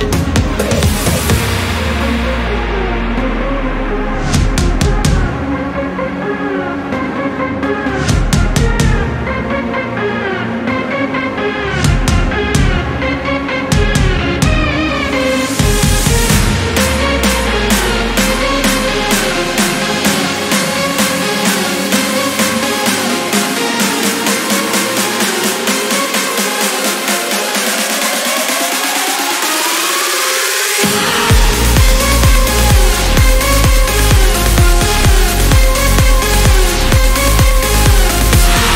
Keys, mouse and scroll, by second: 1.6 4, 3.6-4.8 drag, 6.0 click, 7.1 2, 7.7 0, 10.1 click, 11.2 click, 12.2 click, 13.1 click, 15.0 click, 16.4-18.7 drag, 19.3 click, 20.0 click, 23.5 right click, 24.4 click, 25.5 click, 26.8 click, 30.1 click, 30.5 click, 31.5 scroll down 2, 32.3-32.6 scroll up 1, 33.1 scroll down 1, 34.0-34.3 scroll up 1, 37.1 click.